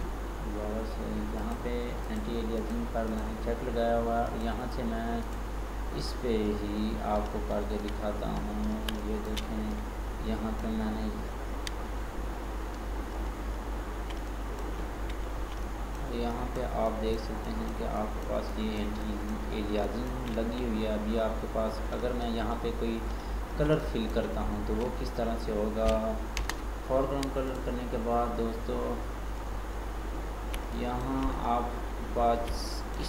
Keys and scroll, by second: 26.5 alt+BackSpace.